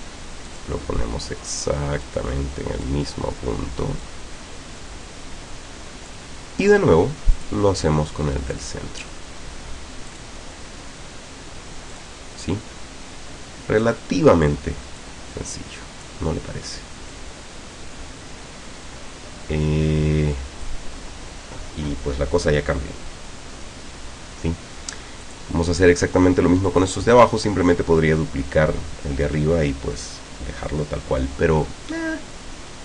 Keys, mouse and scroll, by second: 0.5 click, 2.1 click, 4.1-6.3 drag, 7.4 click, 8.5 click, 10.1 click, 11.9 click, 13.9 click, 15.0-16.3 drag, 17.1-20.9 drag, 25.3 click, 26.7 click.